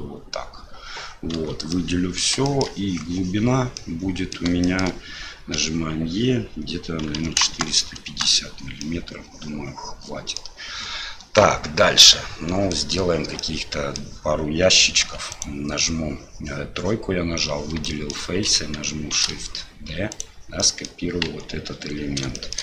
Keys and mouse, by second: 1.3 a, 1.7 middle click, 2.4 shift+click, 3.7 click, 4.6 shift+click, 8.9-10.4 drag, 12.2 middle click, 13.4 middle click, 15.0 3, 15.3 click, 17.8 shift+click, 19.2 shift+d, 20.7 click, 21.2 KP_1, 22.4 shift+click.